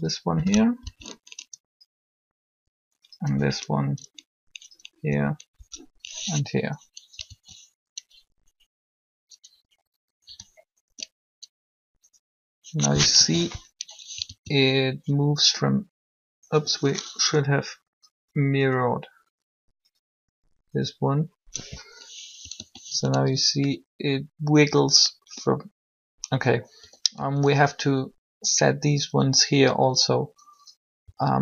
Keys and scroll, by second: 0.5 Down, 3.1 Up, 5.1 Up, 7.2 alt+a, 13.1 1, 13.9 alt+a, 22.5 alt+a, 26.8 a, 27.0 a, 30.8 a, 31.1 a.